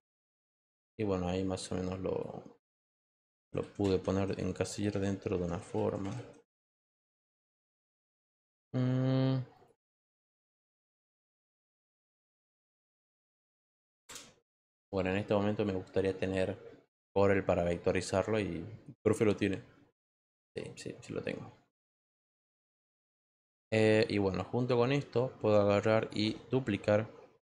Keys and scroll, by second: 8.3 ctrl+t, 14.0 Return.